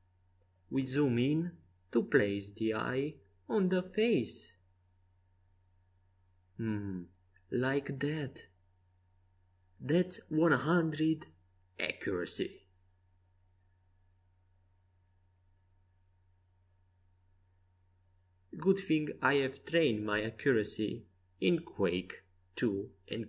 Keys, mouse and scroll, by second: 3.7 s, 6.8-8.8 drag, 9.4 Tab, 13.5-14.6 right drag, 14.6 Tab, 16.2-17.8 drag, 17.0 z, 18.1 Tab, 19.7 Tab, 20.4 Tab.